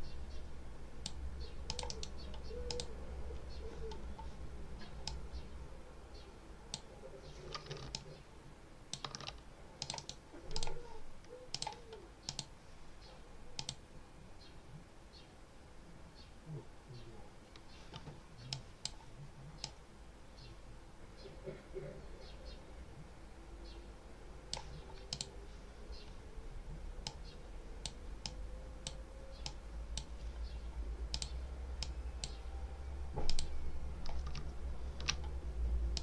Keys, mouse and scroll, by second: 1.6 click, 1.8 right click, 2.6 click, 5.0-6.8 drag, 7.8 ctrl+alt+click, 9.7 click, 9.9 right click, 10.4 click, 11.4 click, 12.2 click, 13.4 click, 18.4 click, 19.5-24.6 drag, 25.0 click, 26.9 click, 28.1 click, 29.3 click, 31.0 click, 31.7 click, 33.2 click, 34.7 ctrl+scroll up 2, 35.8-36.0 drag.